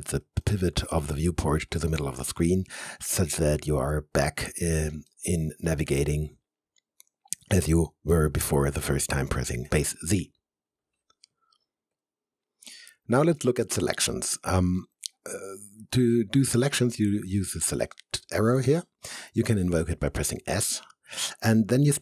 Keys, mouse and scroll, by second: 0.4 alt+middle click, 1.2 alt+right click, 2.2 alt+middle click, 3.5 alt+click, 5.1 alt+middle click, 5.7-8.1 alt+drag, 8.1 alt+middle click, 8.8-10.4 alt+drag, 20.3 s.